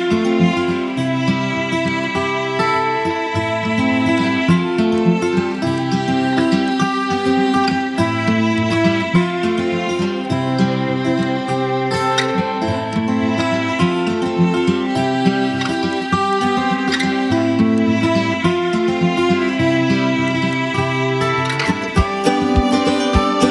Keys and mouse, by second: 1.5 click, 3.8 click, 8.3 click, 10.9-11.5 drag, 19.7 space, 19.9 click, 20.2-20.8 space, 21.3 b, 23.1 ].